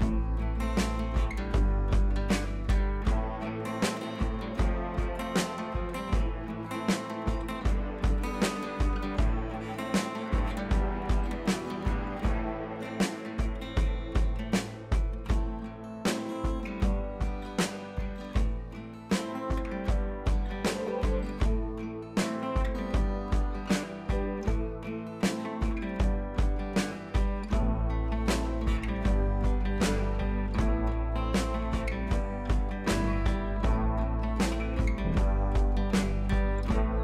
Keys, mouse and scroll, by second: 3.1 ctrl+t, 3.3 drag, 4.7-5.6 shift+click, 5.7 scroll up 1, 6.0 Down, 9.1-9.6 drag, 12.9 click, 13.1 [, 13.3 [, 13.4 [, 13.5 click, 15.9 [, 16.1-18.1 drag, 19.7-20.2 typing, 20.3 click, 22.7 scroll down 1, 23.4 scroll up 1, 24.3 p, 24.7 click, 27.8 ctrl+z, 29.0 ctrl+d, 29.4 click, 29.6 scroll down 1, 30.3 scroll up 1, 30.6-31.3 click, 31.6 scroll down 1, 31.7 scroll up 1, 31.9 space, 32.1 click, 32.2-32.5 space, 32.9 ctrl+t, 33.5-34.1 alt+click, 34.2-34.7 scroll up 2, 34.7-36.5 drag, 36.8-37.0 alt+drag.